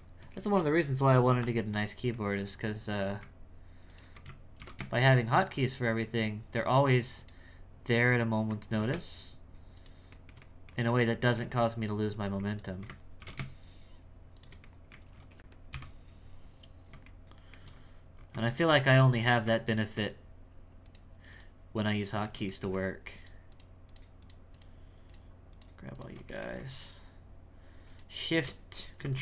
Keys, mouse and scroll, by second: 1.4-2.1 scroll up 1, 2.1 shift+middle click, 2.5 scroll up 1, 2.7 2, 3.9 alt+right click, 4.6 ctrl+b, 8.1-8.7 scroll up 1, 8.7 ctrl+b, 10.1-11.3 shift+middle drag, 11.7-12.5 scroll up 3, 12.5 alt+right click, 13.2 ctrl+b, 14.6 middle click, 15.1 alt+a, 15.7 KP_1, 16.4-17.0 scroll down 7, 17.0 shift+middle click, 17.7-18.2 scroll up 3, 18.5 shift+middle click, 19.1 2, 19.6 ctrl+alt+right click, 20.8 ctrl+alt+shift+right click, 21.3 ctrl+alt+shift+right click, 21.7 ctrl+alt+shift+right click, 22.1 ctrl+alt+shift+right click, 22.5 shift+middle click, 23.2 ctrl+alt+shift+right click, 23.9 ctrl+alt+shift+right click, 24.2 ctrl+alt+shift+right click, 24.5 ctrl+alt+shift+right click, 25.1 ctrl+alt+shift+right click, 25.9 ctrl+alt+shift+right click, 26.3-27.9 shift+middle drag, 27.9 ctrl+alt+shift+right click.